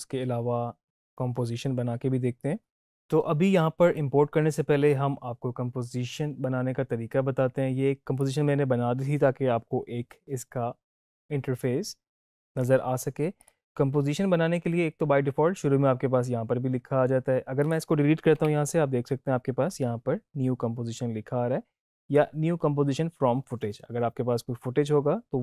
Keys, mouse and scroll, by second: 8.1 click, 13.3 click, 17.5 click.